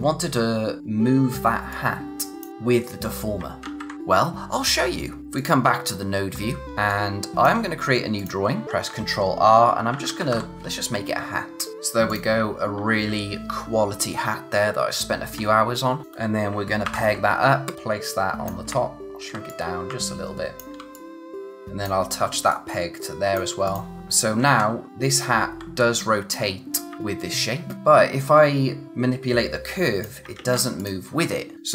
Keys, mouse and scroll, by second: 1.7 click, 3.6 ctrl+z, 3.9 click, 5.2 click, 6.3 scroll up 1, 6.7 space, 6.9 click, 7.2 space, 8.1 click, 8.6 ctrl+r, 9.6-10.8 typing, 11.5 scroll down 1, 12.1 click, 16.0 click, 16.8 ctrl+p, 17.6 click, 19.4 click, 20.9 click, 24.4 ctrl+z, 24.9 click, 26.8 ctrl+z, 27.0 click, 30.4 ctrl+z, 30.7 click.